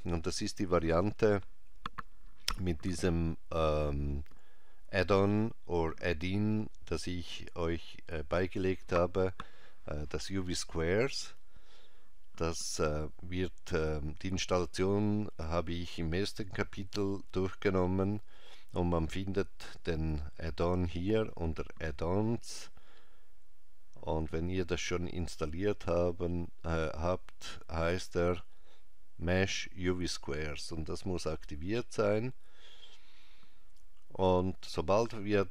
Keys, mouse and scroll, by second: 18.3 click.